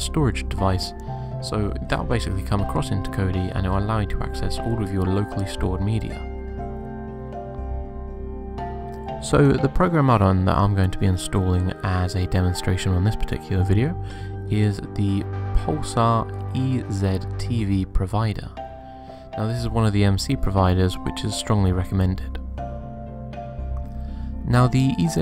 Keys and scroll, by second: 4.0 p.